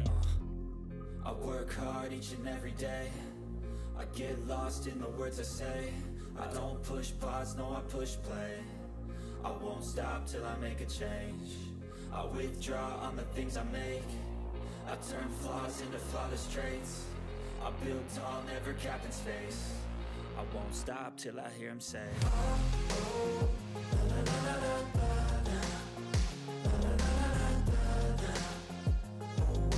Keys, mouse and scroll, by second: 0.6-2.4 typing, 4.2-11.4 typing, 12.4 click, 14.1 scroll up 1, 15.6 click, 19.1 click, 20.4 click, 21.4-22.4 typing, 24.2 ctrl+s, 24.3 typing, 26.3-27.1 typing, 28.4 click.